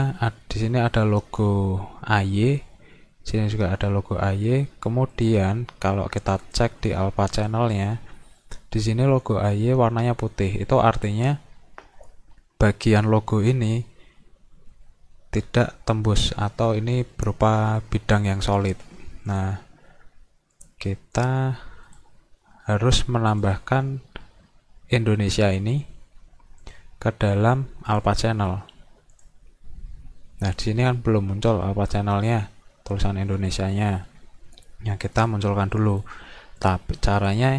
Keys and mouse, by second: 5.1 click, 6.4 click, 7.4 click, 19.3 click, 20.6 click, 21.2 click, 21.9 click, 23.3-25.1 drag, 26.7 click, 27.9 click, 29.1 click, 35.2 click, 35.9 click, 36.6 click, 37.2 click.